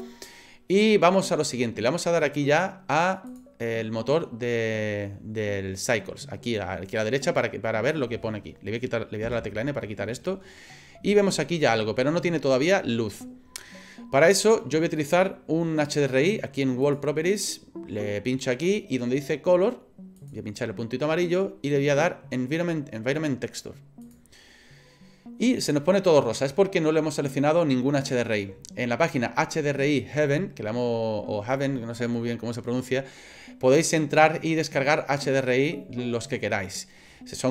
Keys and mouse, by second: 3.3 click, 9.2 n, 11.2 shift+middle click, 12.0-13.2 middle drag, 16.8 click, 20.2-24.1 drag.